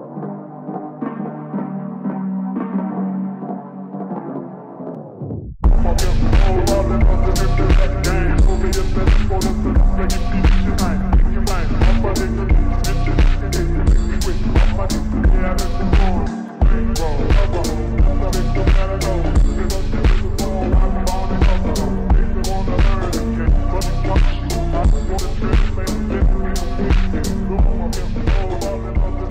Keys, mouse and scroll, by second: 0.6 g, 2.6-3.3 middle drag, 3.3 Tab, 4.4 click, 4.9-6.2 scroll up 3, 6.2-7.6 middle drag, 7.6 click, 8.2 click, 9.2 click, 10.6 click, 11.1-12.0 scroll down 2, 12.0-12.4 scroll down 3, 12.4 g, 13.5-14.0 scroll down 5, 14.0 g, 16.7 Tab, 17.4 click, 18.2 scroll down 3, 18.6 c, 18.9 v, 19.2 g, 21.6 click, 22.7-23.3 scroll down 1, 23.3-24.7 drag, 24.7 r, 27.8-28.5 scroll up 4, 28.5 shift+middle click, 29.1-29.3 scroll up 5.